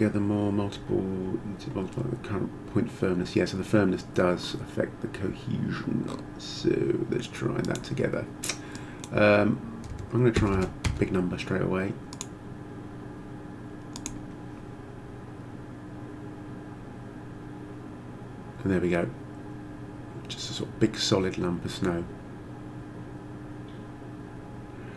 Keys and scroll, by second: 10.0 3, 10.4 0, 10.8 Return.